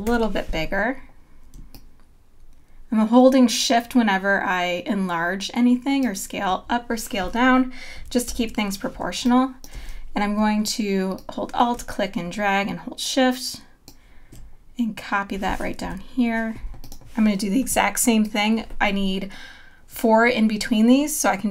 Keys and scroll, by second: 8.3 super+-, 9.0 space, 15.8 Up.